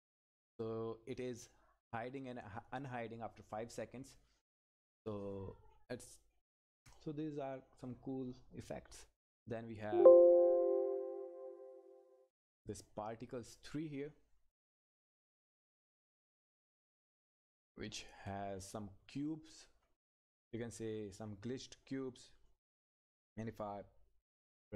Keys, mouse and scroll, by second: 9.7 click, 16.5 click, 17.1 Down, 17.2 scroll down 1, 17.6 Down, 17.7-18.2 scroll down 1, 18.2 click, 18.8 Up, 19.6-20.1 scroll up 1, 20.1 click, 20.8 Left, 20.8-21.3 scroll up 1, 21.3 Left, 24.3 ctrl+F10.